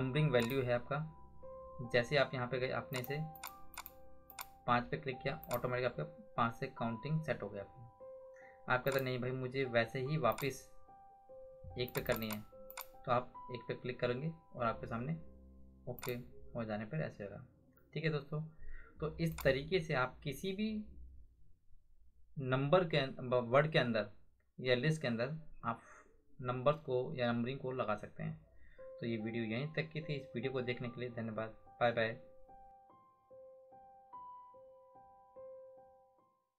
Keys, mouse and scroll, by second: 0.4 click, 2.9 click, 8.9 click, 16.0 click, 19.3 click.